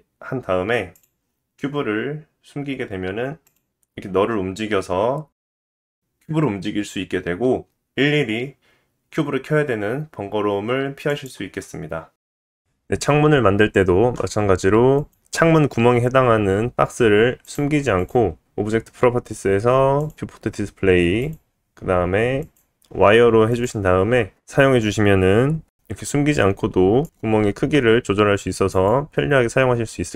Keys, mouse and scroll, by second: 0.9 click, 3.4 click, 3.9-5.0 drag, 6.2 g, 8.2 KP_1, 9.0-13.6 middle drag, 9.0 g, 17.5 click, 18.0 click, 18.7 click, 21.2-24.8 drag, 29.2 s.